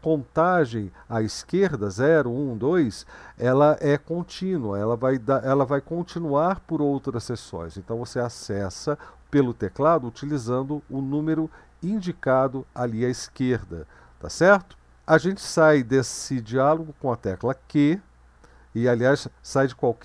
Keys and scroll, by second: 17.8 q.